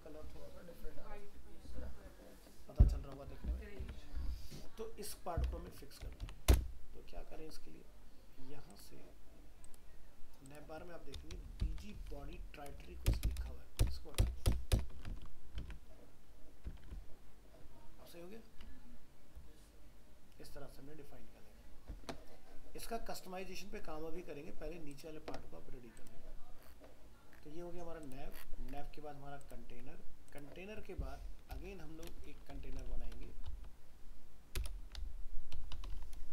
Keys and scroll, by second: 3.8 alt+Tab, 5.7 ctrl+w, 13.1 ctrl+BackSpace, 15.1 ctrl+s, 15.6 alt+Tab.